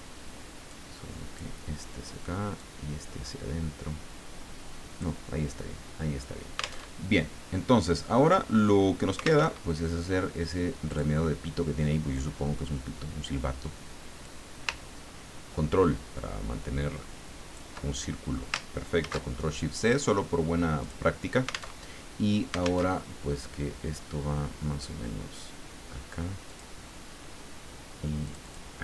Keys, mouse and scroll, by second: 0.7 click, 2.6-5.2 drag, 6.9 alt+Tab, 9.4 alt+Tab, 10.9 click, 14.2-17.9 drag, 19.0 ctrl+shift+c, 20.8 click, 21.7 alt+Tab, 22.9 alt+Tab, 26.4 click, 28.3 click.